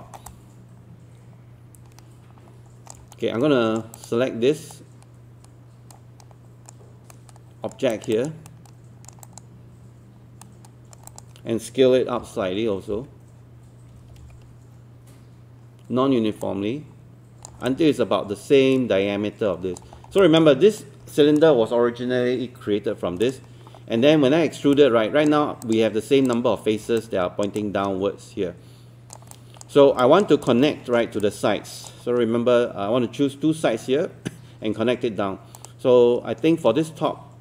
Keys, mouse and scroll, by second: 0.1 alt+middle click, 0.3-3.0 alt+drag, 3.2 right click, 4.0 click, 4.8-7.1 right drag, 7.9 click, 8.5 right click, 9.2 click, 10.4 right click, 11.1 click, 12.2-14.0 typing, 16.4 click, 17.7-19.8 alt+drag, 20.0 scroll down 1, 20.2 alt+click, 23.0 scroll up 1, 23.2 click, 23.9 scroll up 1, 24.8 alt+click, 25.6 click, 27.0 alt+click, 27.6-29.2 alt+drag, 29.3 alt+click, 30.0 alt+click, 31.3-37.4 drag.